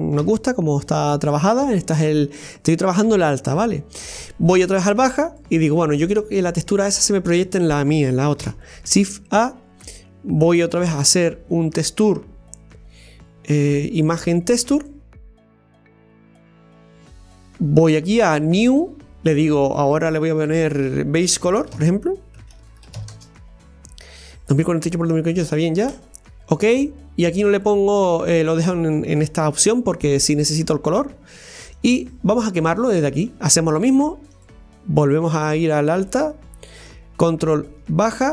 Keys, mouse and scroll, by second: 0.2 Tab, 0.9 Tab, 5.4 click, 31.8 click, 34.5 click, 35.6-36.8 drag.